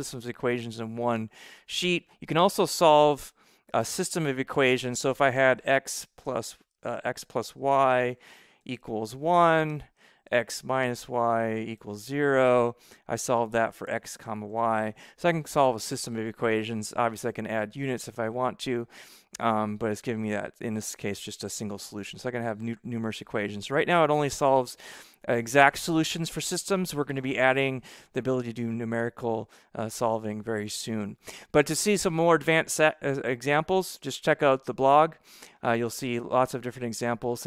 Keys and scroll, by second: 5.3-12.2 typing, 9.6 Return, 13.9-15.3 typing.